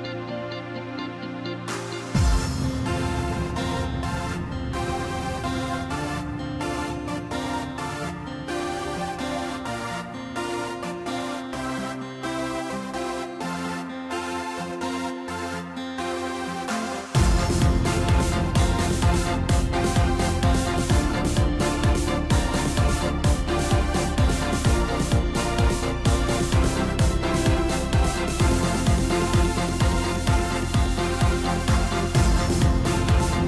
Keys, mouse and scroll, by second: 0.0-1.1 middle drag, 1.1-2.5 scroll up 4, 6.8-9.8 middle drag, 11.2-14.2 drag, 14.9-18.7 middle drag, 19.5-20.9 middle drag, 20.9 Tab, 21.5 middle click, 22.4 scroll down 1, 23.0-23.5 scroll down 9, 24.3 ctrl+KP_2, 24.9 ctrl+KP_2, 25.1 ctrl+KP_2, 25.3 ctrl+KP_2, 26.2-26.7 scroll up 4, 27.0-28.8 middle drag, 30.0 click, 30.5 middle click, 30.9-31.4 scroll up 2, 31.4-32.6 middle drag, 32.6 click.